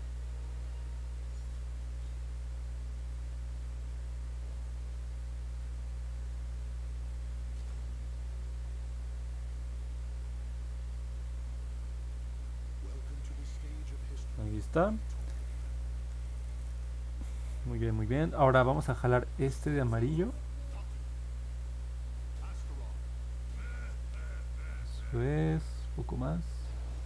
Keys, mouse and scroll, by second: 0.0 click, 2.2 click, 2.5 click, 5.1 click, 5.5 click, 5.8 click, 6.2 click, 6.5 click, 6.9 click, 7.2 click, 7.5 click, 8.4 click, 8.7 click, 8.9 click, 9.4 click, 9.7 click, 10.0 click, 10.3 click, 10.6 click, 10.9 click, 11.1 click, 11.4 click, 11.9 click, 12.1 click, 12.4 click, 12.7 click, 13.2 click, 13.6 click, 19.8 click, 20.2 click, 20.5 click, 21.5 click, 21.9 click, 22.2 click, 22.5 click, 22.8 click, 23.1 click, 23.4 click, 23.8 click, 24.1 click, 24.4 click, 24.7 click, 25.0 click, 25.3 click, 25.6 click, 26.0 click, 26.3 click, 26.6 click, 26.9 click.